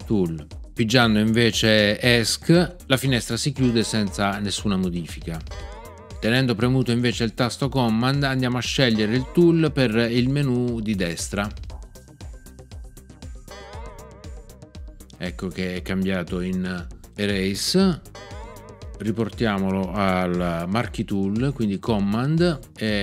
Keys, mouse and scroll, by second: 3.6 Escape, 5.4 \, 13.4 e, 18.1 \.